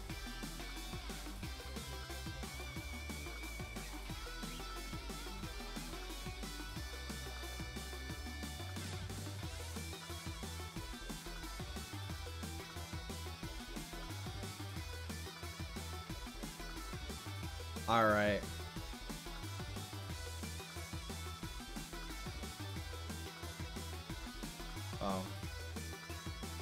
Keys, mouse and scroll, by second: 3.5-6.7 drag, 7.5 ctrl+z, 15.3-18.4 drag, 22.9-25.1 drag, 25.1 ctrl+z.